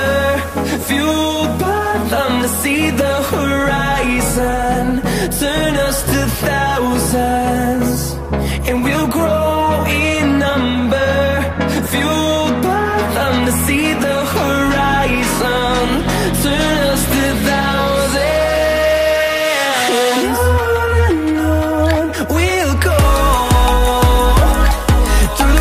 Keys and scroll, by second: 9.1 ctrl+t.